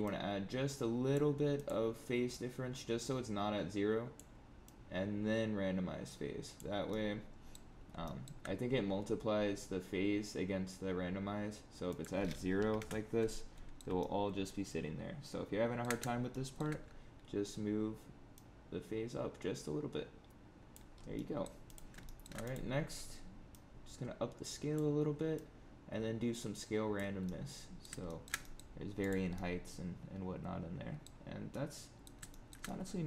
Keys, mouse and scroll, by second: 0.0 click, 2.2 click, 4.6 click, 6.8 middle click, 7.7 scroll up 4, 8.0 shift+middle click, 11.8 click, 13.2 middle click, 13.9 shift+middle click, 16.2 shift+middle click, 18.3 click, 20.9 scroll down 3, 21.1 middle click, 21.6 click, 22.0 shift+middle click, 22.4 click, 23.4 click, 25.3 click, 27.2 middle click, 28.0 shift+middle click, 28.3 middle click, 28.9 click, 29.3 middle click, 31.2 scroll down 3, 31.4 middle click, 32.2 shift+middle click, 32.6 middle click.